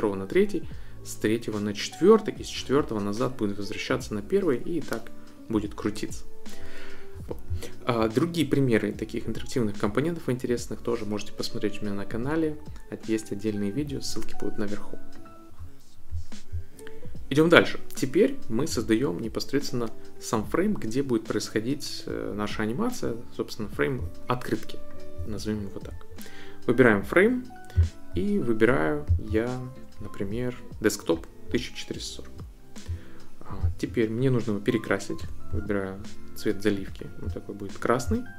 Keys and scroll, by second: 35.2 i.